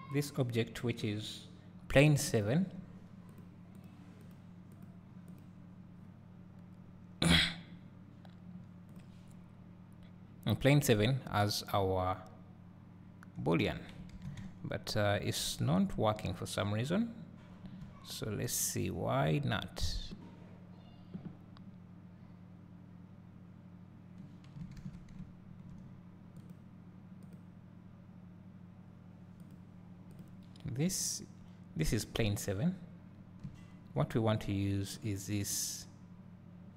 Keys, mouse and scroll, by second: 0.2 click, 2.3 `, 3.4 click, 4.3 click, 4.8 click, 5.4 click, 9.0 click, 12.0 `, 13.0-13.6 middle drag, 16.2-16.6 middle drag, 26.6 click, 30.2 click, 33.5 `, 35.1 click, 35.5 click.